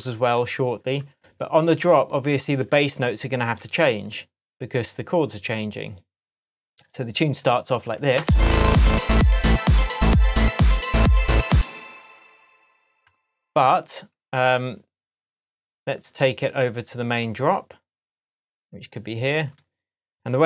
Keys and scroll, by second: 8.2 space, 11.5 space, 20.1 super+l.